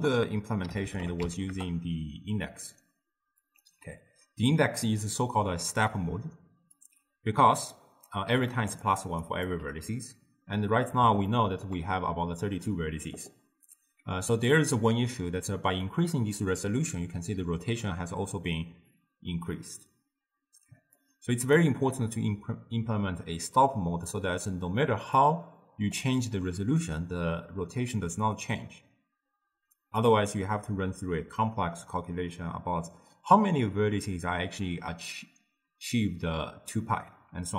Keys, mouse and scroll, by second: 6.8-8.3 drag, 8.3-9.5 typing, 8.5 click, 8.9 click, 9.3 click, 9.9-14.5 middle drag, 15.9-19.0 drag, 21.0 click, 24.1-29.1 drag.